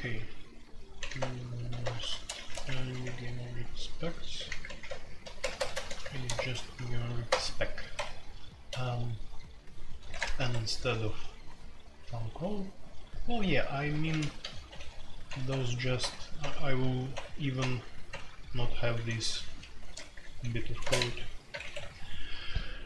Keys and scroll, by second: 0.0-1.0 typing, 2.3 shift+Insert, 2.6 Escape, 2.7-5.1 typing, 6.3 shift+Insert, 6.3-7.2 typing, 7.9 Escape, 8.7 j, 9.8-22.2 typing.